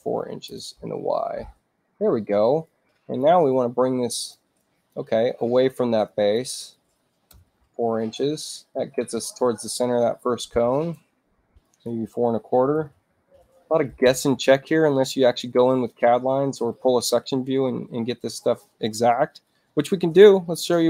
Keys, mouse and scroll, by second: 0.0-0.7 typing, 2.6 click, 3.5 click, 4.5 click, 6.0 click, 7.5 Tab, 7.9 click, 9.1-10.9 drag, 11.6 click, 12.5-13.7 typing, 16.6-18.6 drag.